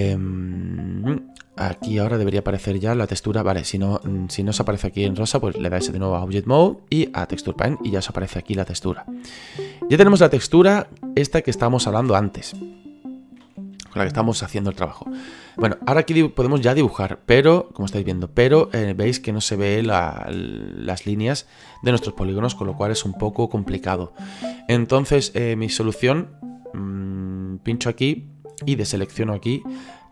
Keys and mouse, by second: 0.2 click, 2.0 click, 5.4 click, 7.6 middle click, 8.9 middle click, 13.4 a, 16.8 click, 20.1 click, 21.2 click, 22.9 ctrl+z, 27.7 click, 29.3 click, 30.0 middle click.